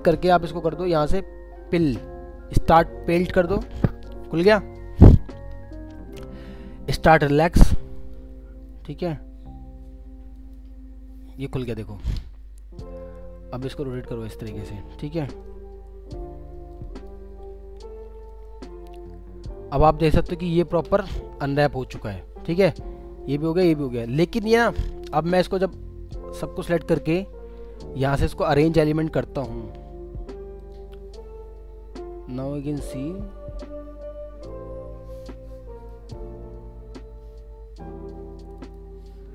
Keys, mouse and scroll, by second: 11.4-12.5 scroll down 1, 22.3 scroll down 1, 22.6 alt+middle click, 25.1 scroll down 1, 31.2 scroll up 1, 32.4 alt+middle click, 32.9 alt+scroll up 2, 33.3 alt+middle click, 35.0 scroll, 35.1-35.6 scroll up 1, 35.9 middle click, 36.4-38.6 scroll up 1, 38.6 double click, 39.0 scroll down 1.